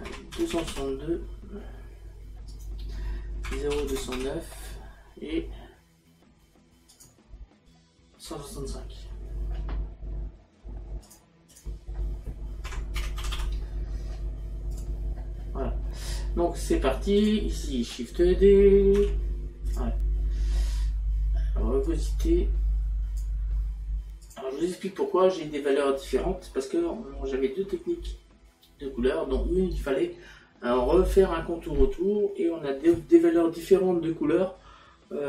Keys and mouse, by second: 0.1 KP_Decimal, 2.5 click, 6.9 click, 11.1 click, 12.7 KP_Decimal, 14.7 click, 17.2 click, 21.9 click, 24.3 click.